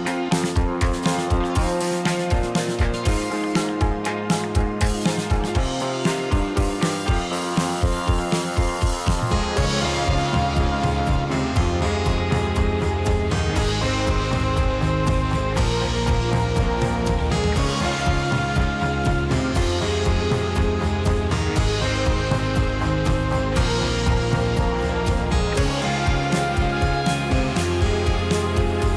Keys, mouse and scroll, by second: 0.3 click, 0.5-2.7 middle drag, 2.7 click, 3.3 shift+click, 3.5-4.5 shift+middle drag, 4.5 shift+click, 5.3 shift+click, 5.7 shift+click, 6.1 middle click, 7.0 shift+click, 7.3 middle click, 8.1 `, 11.4 g, 14.8-15.9 middle drag, 16.7-18.1 middle drag, 18.1 click, 18.3 middle click, 18.8 click, 19.0-23.3 middle drag, 23.3-24.5 drag, 25.7-26.9 middle drag, 27.0 click, 27.4-28.9 middle drag.